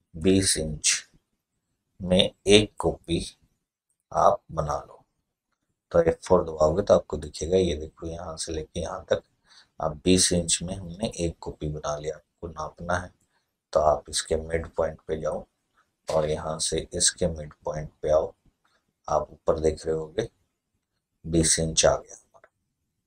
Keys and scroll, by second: 0.0-0.5 typing, 6.0 F4.